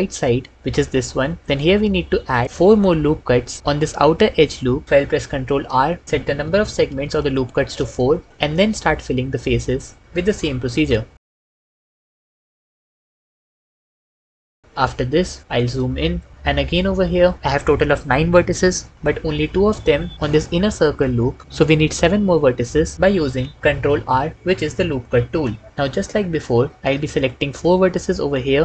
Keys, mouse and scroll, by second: 1.4 shift+middle click, 5.3 ctrl+r, 6.1 s, 6.6 4, 7.5 Return, 7.7 Return, 10.6 f, 12.3 f, 12.9 f, 13.5 f, 14.3 f, 23.0 ctrl+r, 24.9 s, 25.2 7, 25.6 Return, 25.8 ctrl+middle click.